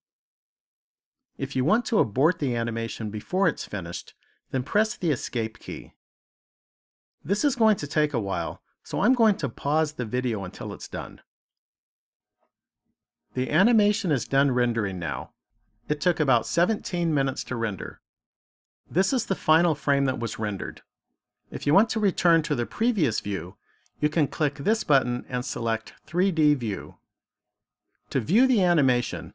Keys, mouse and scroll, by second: 0.7 click, 27.2 click.